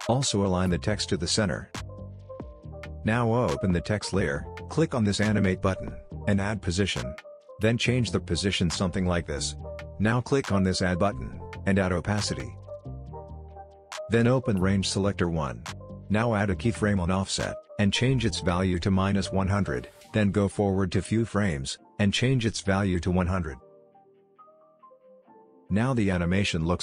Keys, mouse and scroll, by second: 4.1-9.1 drag, 12.8-18.8 drag, 24.7 space.